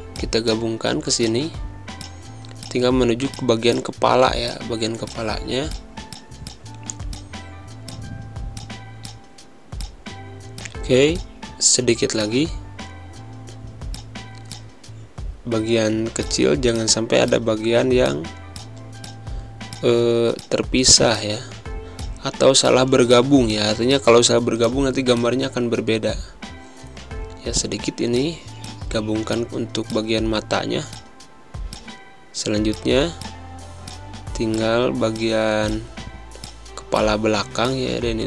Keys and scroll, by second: 3.0 space, 5.6 space, 13.1 ctrl+z, 13.7 z, 14.2 space, 15.3 v, 24.4 z, 25.0 space, 29.1 z, 30.2 space, 31.8 v, 34.9 space, 37.6 z.